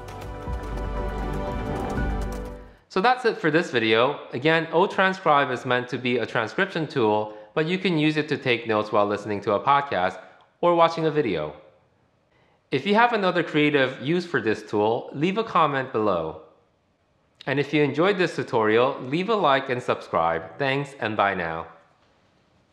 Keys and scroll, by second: 2.6 super+4.